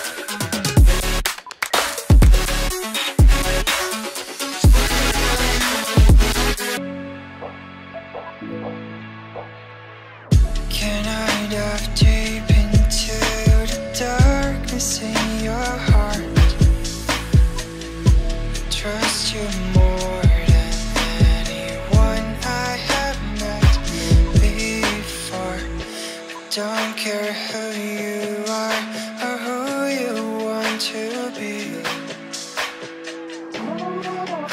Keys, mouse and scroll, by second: 0.3 right click, 0.4 shift+click, 0.7 typing, 1.5 shift+F2, 2.6-3.4 scroll down 1, 3.7 double click, 5.1 shift+click, 5.6 right click, 8.5 ctrl+click, 10.7 double click, 11.1 F2, 12.7 right click, 14.1 double click, 15.3 ctrl+click, 17.5 ctrl+click, 17.7 shift+click, 24.0 ctrl+right click, 25.5 Down, 26.3 ctrl+click, 28.6 double click, 29.1-29.5 scroll down 1, 30.6 double click, 31.8 right click.